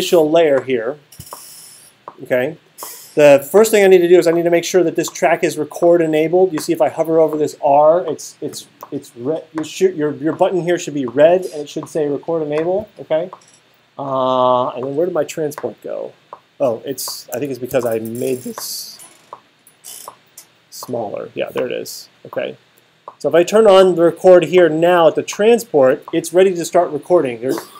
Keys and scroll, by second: 17.7 alt+super+8.